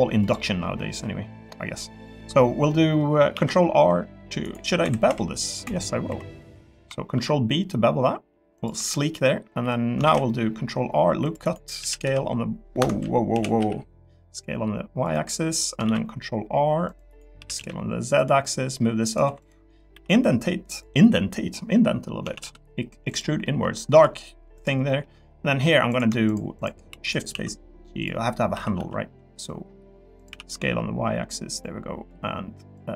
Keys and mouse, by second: 0.2 click, 0.9-2.0 middle drag, 2.7 middle click, 3.3 ctrl+r, 4.8 2, 5.1 z, 6.1 3, 6.3 click, 7.1 ctrl+b, 8.7 3, 9.6 3, 10.0 ctrl+r, 11.8 s, 12.0 u, 12.8 Escape, 13.3 s, 13.6 y, 15.0 click, 16.0 ctrl+r, 17.4 s, 17.5 z, 18.2 click, 19.2 3, 19.9 e, 20.7 click, 22.2 a, 22.4 g, 23.4 middle click, 24.0 click, 24.5 click, 24.9 middle click, 26.3 shift+click, 26.5 shift+click, 26.9 shift+d, 27.3 s, 28.0 click, 28.5 s, 28.8 z, 30.3 s, 30.5 y.